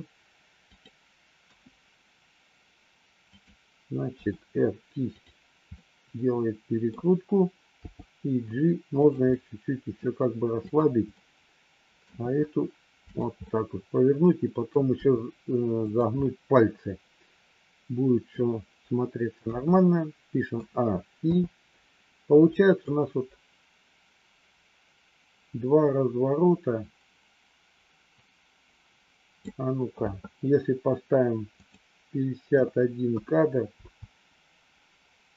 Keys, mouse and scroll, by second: 1.4 KP_1, 3.2 click, 4.0 r, 5.8-6.9 middle drag, 7.7 g, 9.3 scroll up 1, 9.4 middle click, 10.7 click, 11.4 middle click, 12.0 r, 13.4-14.7 middle drag, 14.9 r, 16.2-18.3 middle drag, 19.3 KP_1, 20.5 a, 21.2 i, 22.8-29.4 drag, 31.7-35.3 drag.